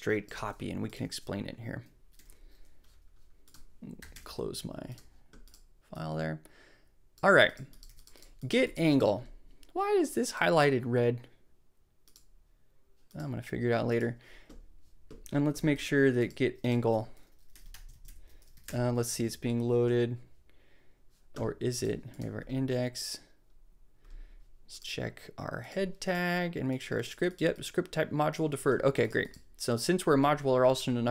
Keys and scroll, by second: 0.3 super+c, 2.1 super+v, 4.0 super+k, 4.1 super+b, 7.8 super+s, 17.3-18.4 typing, 18.5 super+a, 18.6 super+BackSpace, 19.6 BackSpace.